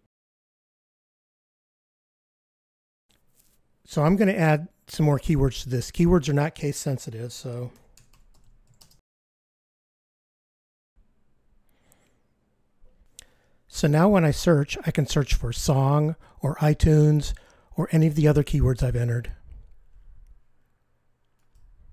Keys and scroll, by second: 12.7 F15.